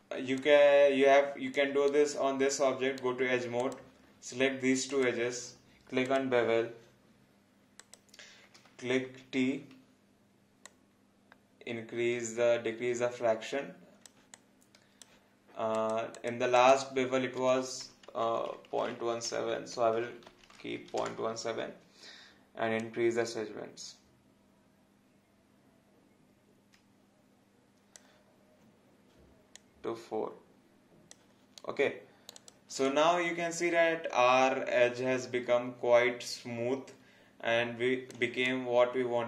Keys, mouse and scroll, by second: 0.0 scroll down 1, 0.4 alt+click, 1.9 right click, 3.6 click, 4.9 shift+click, 9.1 t, 10.7 click, 14.3 alt+click, 18.2 Right, 21.0 Return, 22.8 click, 31.6 right click, 32.3 click, 32.8 alt+click, 38.5 alt+click.